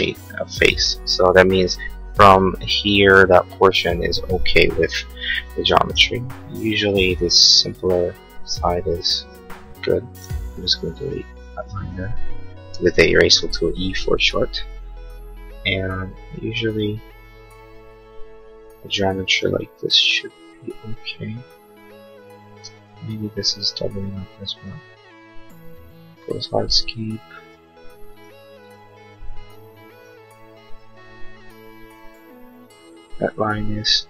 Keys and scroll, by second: 4.9 l, 5.5 l, 10.2 e, 12.8 l, 18.7 Escape, 22.5 space, 23.3 space.